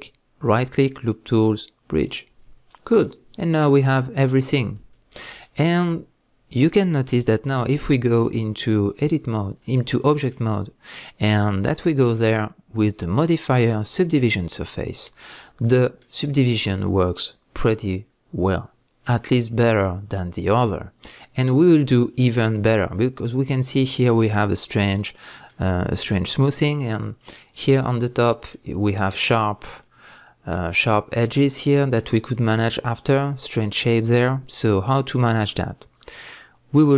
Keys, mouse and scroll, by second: 0.0-3.0 right drag, 2.4-3.0 scroll down 2, 3.0-11.6 middle drag, 8.3-8.7 scroll down 1, 8.7-9.0 scroll up 1, 9.0 Tab, 11.6 click, 12.8-15.3 drag, 15.3-36.9 middle drag.